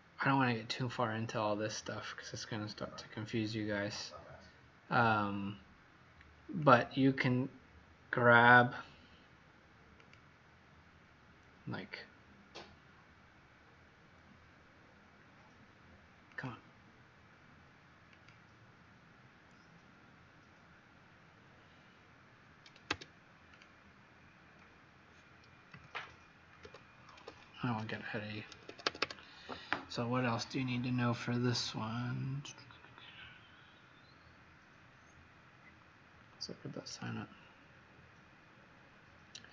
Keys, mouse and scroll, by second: 6.5 click, 22.8 Tab, 23.5 click, 25.7 ctrl+z, 25.9 ctrl+z, 27.2 ctrl+z, 28.4 Escape, 28.7 Escape, 29.0 Escape, 36.9 click.